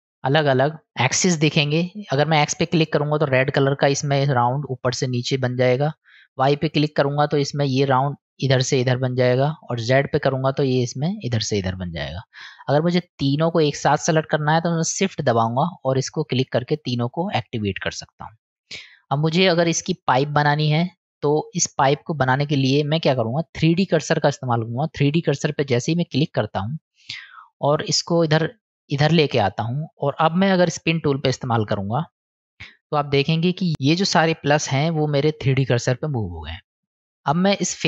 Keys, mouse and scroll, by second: 0.2 click, 2.2 click, 6.1 click, 7.3-7.9 middle drag, 9.7 click, 15.4 shift+click, 16.2 shift+click, 17.2-18.8 middle drag, 19.6-20.5 middle drag, 26.1 click, 28.9 click, 32.1 click.